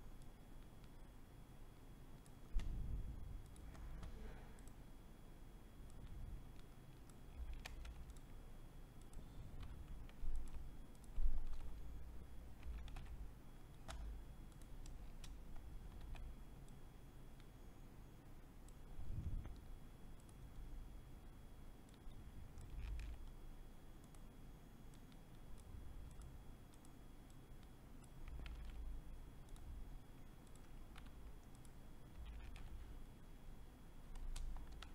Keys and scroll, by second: 7.4 ctrl+c, 9.3 t, 11.1 ctrl+b, 12.5 ctrl+v, 14.8 Return, 15.7 v, 22.7 ctrl+c, 28.3 ctrl+c, 30.7 t, 32.1 ctrl+v, 33.9 Return, 34.6 v.